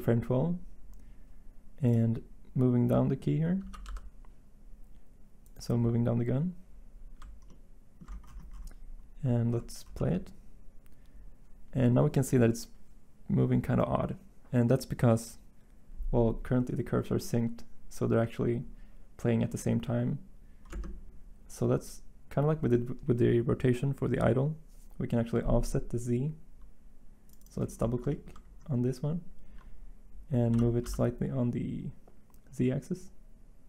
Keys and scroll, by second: 3.6 g, 3.8 y, 30.5 g, 30.8 x.